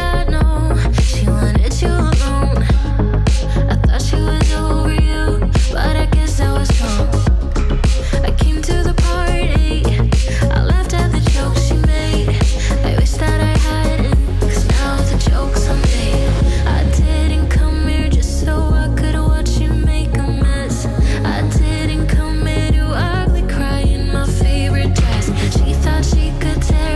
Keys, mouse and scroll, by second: 0.0 click, 0.9 3, 1.4 Return, 2.3 KP_3, 3.5-8.2 drag, 9.4-10.4 typing, 11.0 Return, 13.4 click, 14.0-14.8 typing, 16.4-17.0 typing, 16.6-19.2 drag, 20.1-20.4 typing, 20.5 Return, 23.1-24.7 drag, 25.4 s, 26.2-26.9 drag.